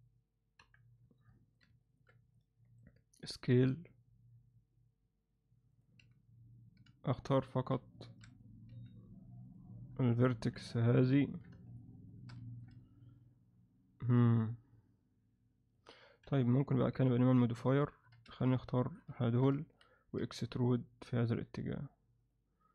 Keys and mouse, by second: 0.6 KP_7, 1.3 ctrl+alt+middle click, 1.8 ctrl+alt+middle click, 2.3 alt+middle click, 3.5 s, 6.0 z, 7.1 shift+click, 7.4 shift+click, 8.1 alt+a, 8.3 click, 8.7 z, 9.5 click, 10.5 KP_Divide, 11.2 ctrl+alt+middle click, 11.7 shift+click, 12.1 shift+click, 12.5 ctrl+alt+middle click, 12.8-15.7 alt+middle drag, 16.2 KP_1, 16.9 z, 17.8 ctrl+alt+middle click, 18.2 z, 18.6 alt+middle click, 19.2 ctrl+alt+middle click, 19.6 alt+shift+middle click, 20.3 e.